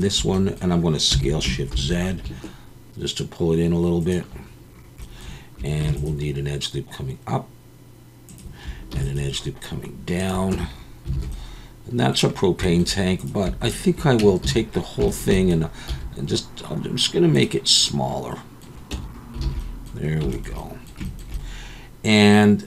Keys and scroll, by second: 1.1 s, 1.7 shift+z, 5.8 ctrl+r, 10.5 Tab, 11.1 alt+a, 14.2 Tab, 14.4 a, 15.9 s, 18.9 Tab, 19.5 alt+a.